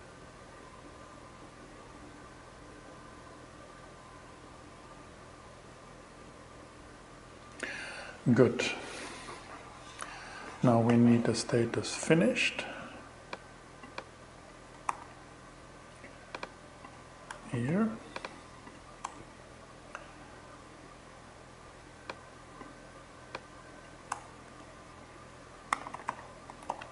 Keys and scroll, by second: 14.3 super+c, 16.7 Return, 17.0 super+v, 18.5 BackSpace, 23.5 BackSpace, 24.4 Left, 24.9-26.9 typing.